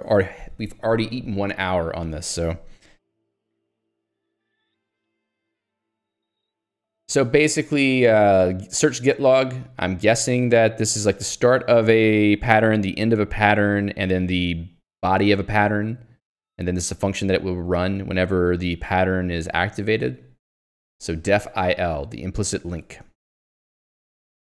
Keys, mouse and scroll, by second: 2.8 j, 4.6 ctrl+d, 11.5 click, 19.4 click, 20.1 Escape, 20.8 ctrl+u, 22.9 j, 24.3 ctrl+d.